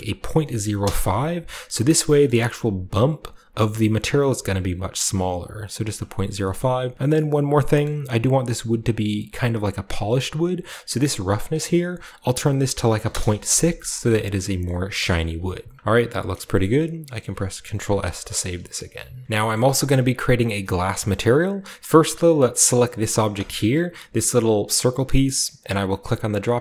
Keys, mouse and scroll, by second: 0.1-0.5 typing, 0.7 Return, 1.9 shift+middle click, 2.2 shift+middle click, 2.2-3.8 shift+scroll up 2, 3.8-6.1 middle drag, 6.1-6.9 scroll down 2, 7.8-9.7 middle drag, 7.8 typing, 11.3-12.7 drag, 12.9 typing, 13.0 Return, 14.6-15.7 middle drag, 14.9 KP_0, 15.7-16.5 scroll down 1, 16.5-17.7 shift+middle drag, 17.4-18.9 typing, 18.3-19.2 middle drag, 18.6-19.2 scroll down 1, 19.2 ctrl+b, 19.2-20.6 shift+drag, 20.6-22.2 scroll up 1, 22.2 middle click, 22.4 right click, 22.4 scroll up 1, 22.4 g, 23.4-25.3 right drag, 25.8-26.6 drag.